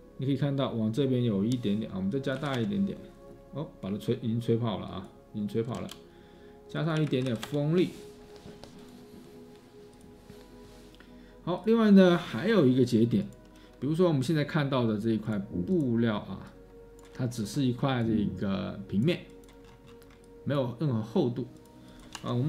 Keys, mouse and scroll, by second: 2.6 typing, 5.6-7.8 typing, 21.5 space, 22.2 Tab.